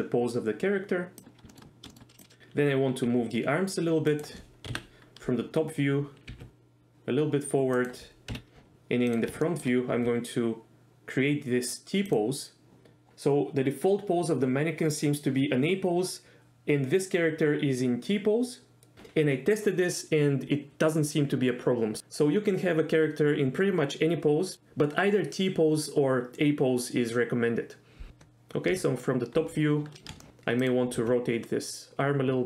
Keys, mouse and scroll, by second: 1.5 shift+middle click, 1.9 shift+middle click, 2.4 g, 3.1 g, 4.1 click, 4.7 KP_7, 6.3 g, 7.8 click, 8.3 KP_1, 9.1 click, 9.4 shift+middle click, 9.9 r, 12.1 click, 28.7 KP_7, 30.2 shift+middle click, 31.0 r.